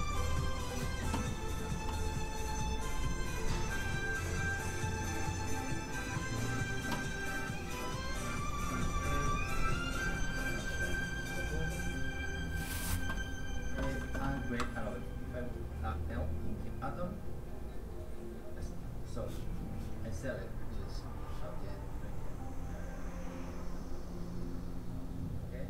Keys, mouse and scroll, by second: 1.5-3.0 scroll down 1, 3.0 click, 6.4-8.3 scroll up 1, 8.3 click.